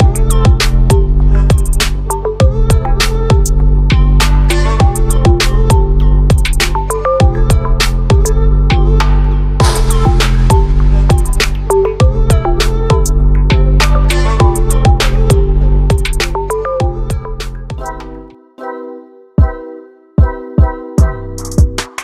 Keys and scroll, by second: 15.2 ctrl+a, 19.4 ctrl+t.